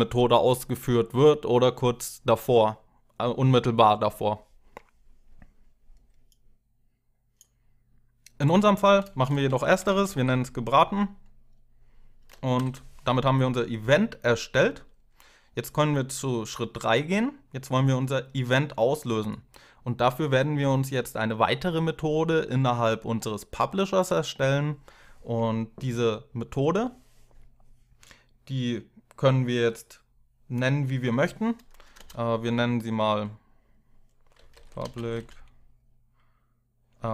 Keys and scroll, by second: 8.7-10.5 typing, 12.1-12.9 typing, 31.7 Return, 33.9-35.4 typing.